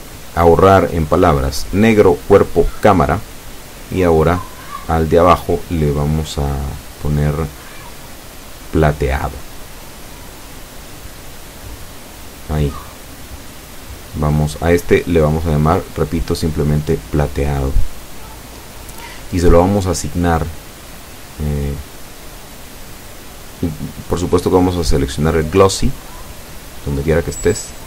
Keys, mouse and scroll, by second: 1.0 click, 1.8 click, 3.7-7.0 typing, 7.4 Return, 10.8 click, 11.6 click, 20.5 click, 24.2-24.9 typing, 25.5 Return.